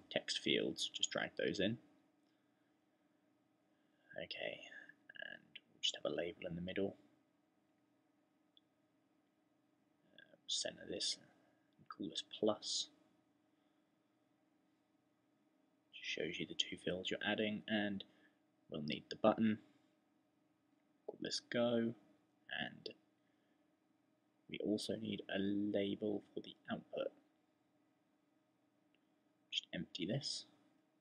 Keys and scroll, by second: 13.2 shift++, 20.2-21.2 typing.